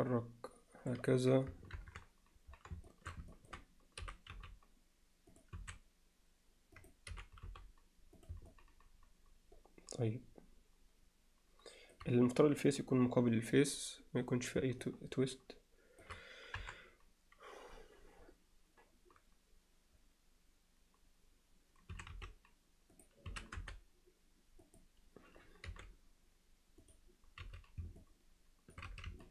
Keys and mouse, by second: 1.8 ctrl+KP_1, 2.9 alt+shift+middle click, 3.3 ctrl+alt+middle click, 4.0 g, 5.6 s, 8.5-11.9 alt+middle drag, 14.9-16.0 alt+middle drag, 16.6 KP_7, 21.9 s, 23.3 s, 25.7 g, 27.4 z, 28.0 middle click, 28.9 z, 29.2 middle click.